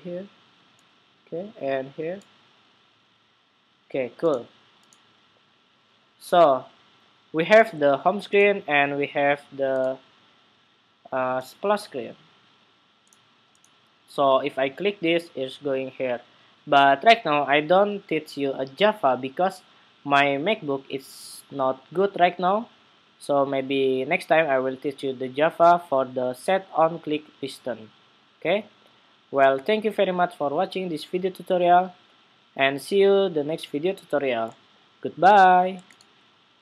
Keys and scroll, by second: 6.4 super+-.